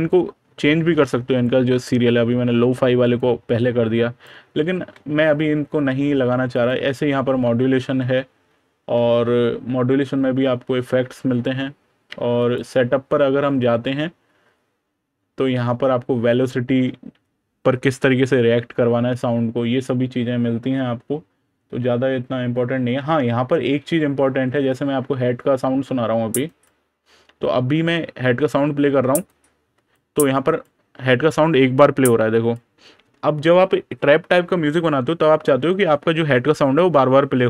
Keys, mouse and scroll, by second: 3.0 click, 4.6 super+KP_Subtract, 6.4 click, 7.6 super+KP_Add, 8.5 super+KP_Add, 8.6 super+KP_Subtract, 12.2 click, 13.2 super+KP_Add, 23.7 super+KP_Subtract, 26.3 click, 30.2 click.